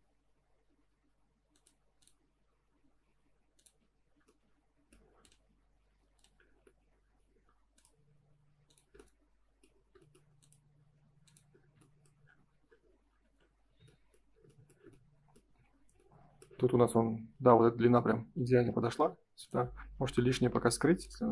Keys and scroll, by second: 3.9 F4, 12.2 space, 13.0 ctrl+s, 15.5 F3, 17.9 F3.